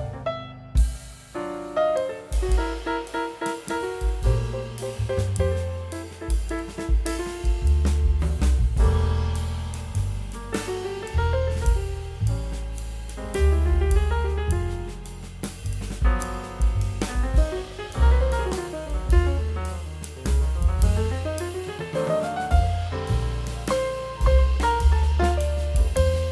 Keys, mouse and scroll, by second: 10.7 typing, 18.6 middle click, 18.9 scroll down 1, 19.6 scroll up 1, 20.0 scroll down 1, 21.1 middle click.